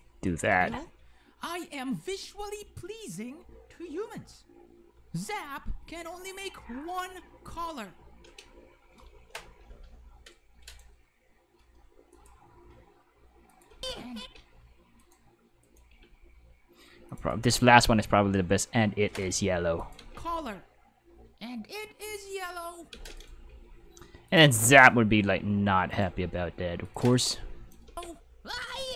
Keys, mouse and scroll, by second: 0.2 click, 0.5 space, 8.2 space, 9.6 k, 10.7-12.1 right drag, 12.1 click, 13.5 click, 13.7 space, 14.2 space, 15.0 right click, 15.6 right click, 15.9 g, 17.0 click, 17.3 right click, 17.7 g, 19.2 click, 19.8 click, 20.0 space, 22.9 space, 23.2 right click, 23.5 g, 24.2 click, 24.6-25.9 middle drag, 25.9 right click, 26.0 g, 26.8 click, 27.3-27.7 drag, 27.9 space.